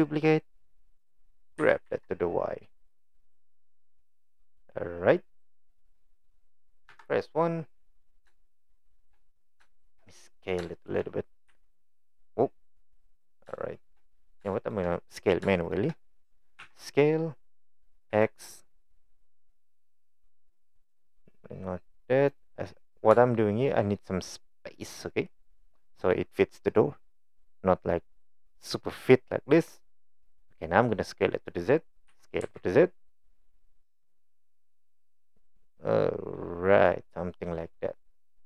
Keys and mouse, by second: 1.6 g, 6.9 KP_1, 8.4 shift+middle click, 9.7 shift+middle click, 11.5 s, 13.6 shift+middle click, 14.6 shift+middle click, 15.6 shift+middle click, 16.6 s, 23.3-23.8 shift+middle drag, 32.1 s, 38.3 click.